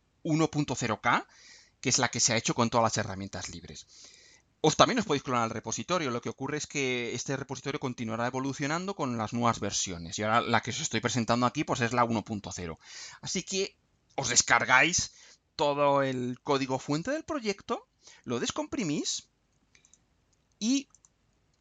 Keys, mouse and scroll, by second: 19.0 click, 19.8 click, 20.9 click.